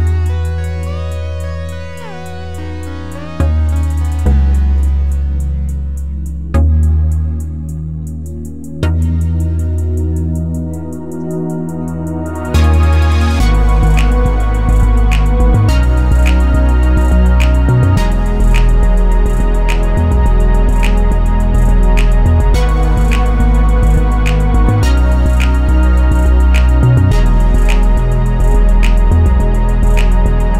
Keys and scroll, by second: 1.8-2.9 typing, 10.2-11.0 typing, 15.0 2, 15.3 Return, 16.9 ctrl+z, 18.6 2, 18.8 Return, 19.9 ctrl+z, 21.4-22.2 typing, 27.6 2, 27.8 Return.